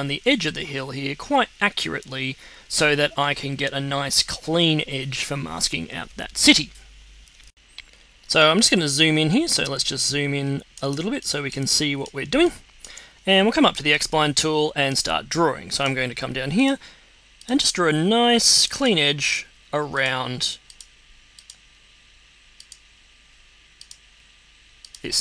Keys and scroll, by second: 7.4 z, 9.0-9.8 typing, 10.8 z, 12.2 x.